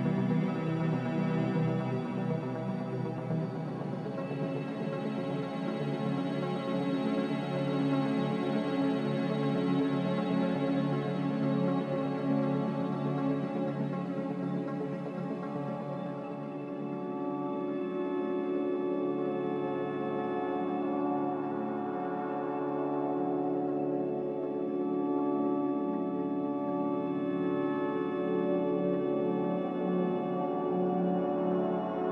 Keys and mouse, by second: 1.4 s, 8.7 click, 10.6 alt+z, 11.5 g, 15.3 s, 21.4-22.7 middle drag, 23.4 Tab, 24.1 Tab, 26.0 Tab, 27.0 Tab, 28.5-29.0 middle drag, 29.4-30.0 shift+middle drag, 30.9 Tab.